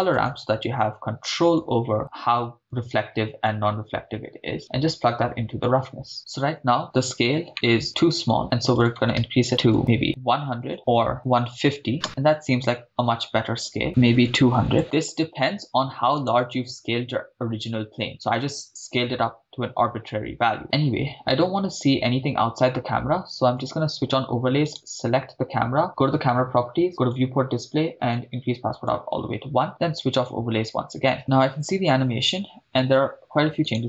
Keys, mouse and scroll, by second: 2.6-3.5 drag, 4.6-6.1 drag, 7.5 middle drag, 8.8-9.8 drag, 10.0 0, 10.6 click, 12.0 shift+space, 13.7 shift+space, 13.8 click, 13.8 shift+space, 14.2 0, 16.4 drag, 16.4 right click, 23.6 click, 24.9 click, 24.9 right click, 27.0 click, 27.4-28.1 scroll down 2, 28.1 click, 30.2-31.1 drag, 32.8 shift+space.